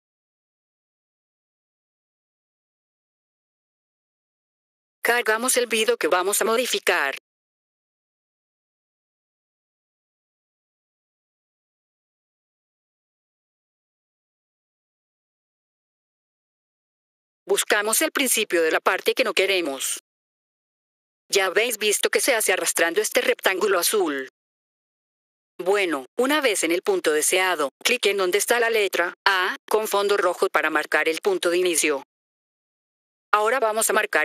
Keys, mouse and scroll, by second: 0.1 click, 0.2 click, 2.2 click, 3.8 F4, 4.9 click, 8.7 click, 12.9 click, 17.1-17.9 typing, 17.4 click, 20.5 click.